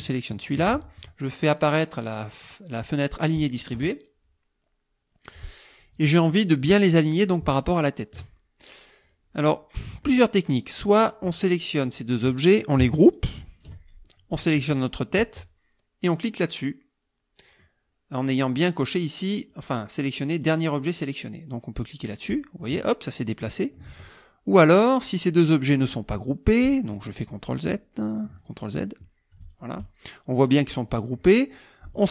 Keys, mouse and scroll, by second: 0.3 shift+click, 3.4 click, 7.6 shift+click, 9.1 click, 10.8 click, 11.9 shift+click, 13.4 ctrl+g, 14.7 shift+click, 19.5 click, 20.4 click, 22.3 click, 23.9 ctrl+z, 24.5 ctrl+click, 25.0 click, 27.3 ctrl+z, 28.4 ctrl+click, 29.5 shift+click, 31.9 shift+click.